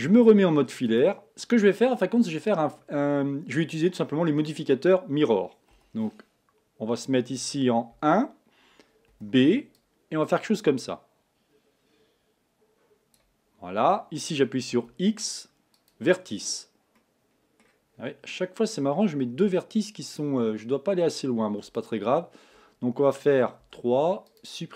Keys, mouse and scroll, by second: 0.0 z, 5.7 b, 7.9 1, 9.1 b, 14.7 x, 17.0 middle click, 17.9-19.4 scroll up 5, 19.4 z, 21.8 shift+click, 23.6 3, 24.3 click.